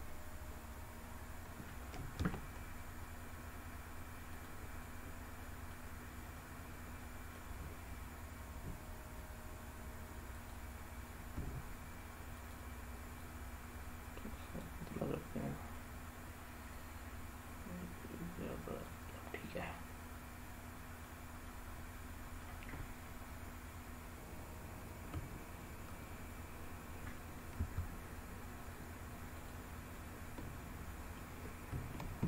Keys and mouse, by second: 2.0 g, 4.2 click, 5.4 middle click, 6.2-7.2 middle drag, 8.4 s, 10.2 click, 11.2 s, 12.2 click, 13.0-14.5 drag, 14.8-15.6 middle drag, 16.6-18.7 drag, 19.1-20.9 middle drag, 21.3-22.3 middle drag, 24.1 ctrl+z, 25.5 click, 27.2 s, 29.0 click, 29.5-30.8 middle drag, 31.8 ctrl+z.